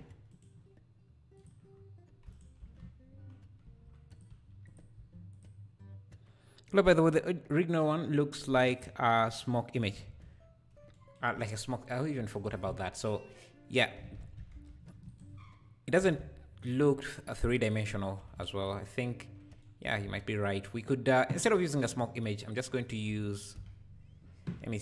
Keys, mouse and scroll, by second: 0.3-1.4 shift+right drag, 1.4 click, 2.3 shift+right click, 2.6 shift+s, 3.6 shift+s, 10.1 alt+a, 10.5 `, 11.3 `, 12.3 shift+right click, 12.5 shift+a, 13.1 shift+a, 13.9 r, 18.2 ctrl+a, 19.8 g, 22.4 click, 22.9 scroll down 2, 23.1 a, 23.5 KP_Decimal.